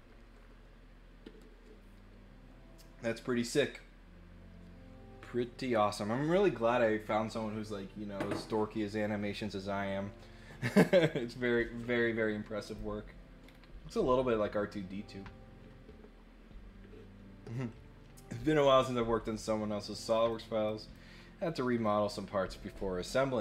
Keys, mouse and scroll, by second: 12.6 click, 13.4 scroll down 2, 13.9 middle click, 18.6-19.9 drag, 20.3 click, 20.6 click, 21.8 click.